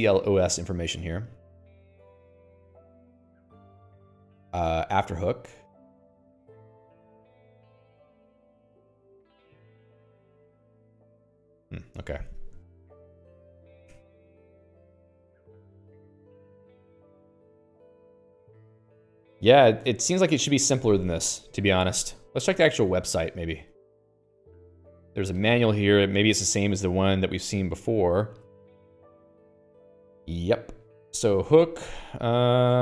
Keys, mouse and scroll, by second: 1.5 click, 2.4 q, 5.2 middle click, 7.1 click, 8.1 q, 10.9 click, 11.0 q, 17.3 q.